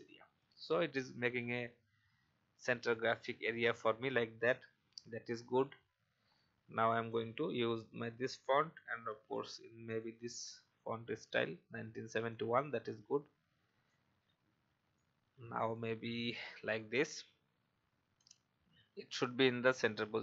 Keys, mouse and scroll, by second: 4.2 alt+scroll down 1, 4.9 click, 5.3-6.3 alt+scroll down 1, 6.3 click, 8.9 i, 9.8 click, 10.7 v, 11.3 alt+scroll up 1, 12.3-14.2 drag, 14.9-16.3 alt+shift+drag, 16.9 Right, 17.3-18.4 typing, 19.6-20.2 scroll up 1.